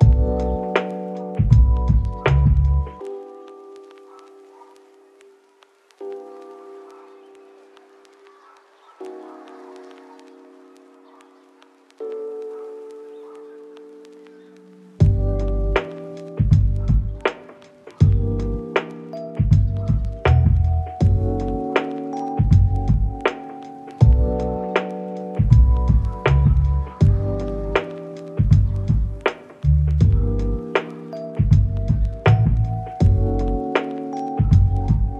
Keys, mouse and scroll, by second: 2.3 shift+middle click, 2.7 ctrl+middle click, 3.5 ctrl+middle click, 5.7 middle click, 7.9 middle click, 11.8 middle click, 12.5 shift+middle click, 13.1 double click, 15.6 ctrl+z, 15.8 ctrl+z, 16.1 ctrl+z, 16.4 ctrl+z, 16.6 middle click, 17.5 right click, 18.3 2, 18.4 0, 18.5 Return, 19.9 right click, 21.8 s, 24.5 right click, 24.9 middle click, 27.5 double click, 28.2 middle click, 29.1 double click, 30.9 ctrl+z, 31.1 middle click, 31.8 double click, 32.7 middle click, 33.4 double click, 33.9 middle click.